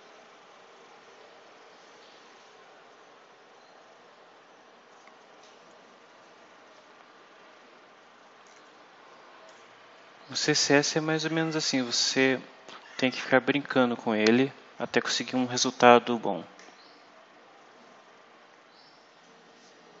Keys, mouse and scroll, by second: 1.0-2.0 scroll down 4, 2.4 scroll up 2, 3.5-4.4 scroll up 4, 9.4 click, 11.6-13.1 drag, 13.3-13.7 scroll down 1, 14.1 scroll down 2, 15.7-16.6 scroll up 4.